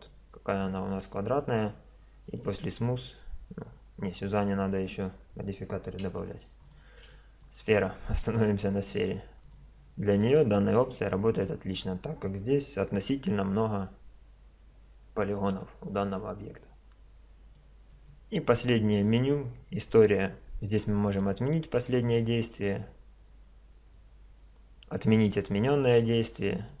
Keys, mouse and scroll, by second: 0.1-2.3 middle drag, 2.3-4.2 drag, 4.0-6.4 middle drag, 6.4 x, 7.1-7.6 middle drag, 7.6-8.4 drag, 8.4 right click, 9.2 click, 9.4 middle click, 9.4 click, 9.9-11.1 middle drag, 11.3 middle click, 13.0 Tab, 15.5 Tab, 17.1-18.0 middle drag, 21.0-22.9 drag, 25.2-26.8 drag.